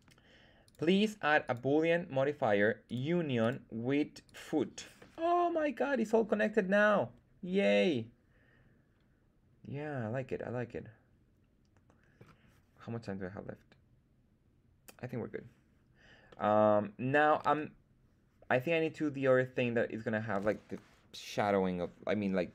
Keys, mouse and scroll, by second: 0.6-1.5 drag, 2.8 click, 3.3-4.4 drag, 4.9-12.3 middle drag, 16.3-17.3 middle drag.